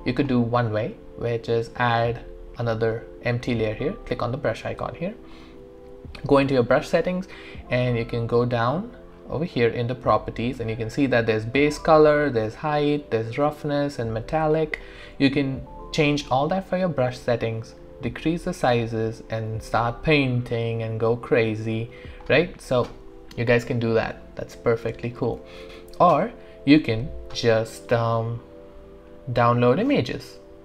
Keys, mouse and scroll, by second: 2.1 click, 6.2 click, 8.6-9.1 scroll down 1, 10.6-11.0 scroll up 1, 11.9 scroll down 1, 12.0 scroll, 14.5 scroll up 1, 15.6 scroll down 1, 17.6 scroll down 1, 17.7 ctrl+right click, 18.7-22.5 drag, 25.4 ctrl+z.